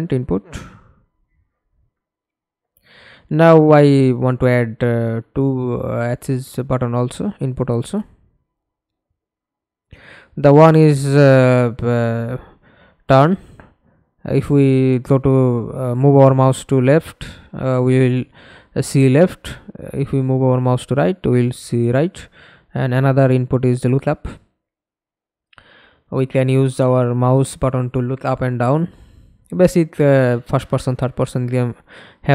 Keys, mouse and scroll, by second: 0.0-0.5 typing, 1.4 Escape, 1.8 middle click, 2.7 F11, 7.6 alt+F9, 12.2-15.7 scroll down 10, 15.9 shift+t, 16.1 u, 16.7 n, 17.2 Return, 19.6 shift+l, 21.1 o, 21.5 p, 23.6 u, 23.9 p, 24.2 Return, 26.5 space, 27.2 Right, 27.5 BackSpace, 28.0 shift+u, 28.4 Return.